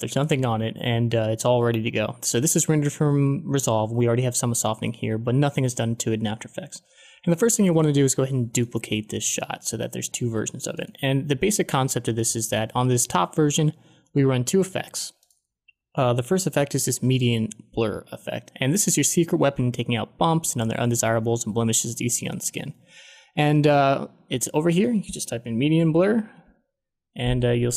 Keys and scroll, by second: 25.5-26.8 typing.